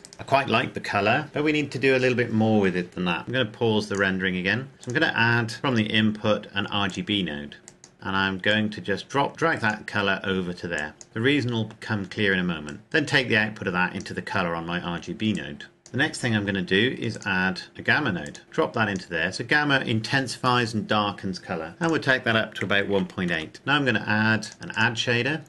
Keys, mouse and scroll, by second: 0.5 right click, 3.2 click, 4.1 click, 7.1 click, 7.9-8.5 scroll up 1, 8.5 click, 12.6 click, 17.1 click, 18.2 click, 21.8 click, 22.6 KP_1, 22.7 KP_Decimal, 23.0 KP_8, 23.3 KP_Enter, 24.4 click.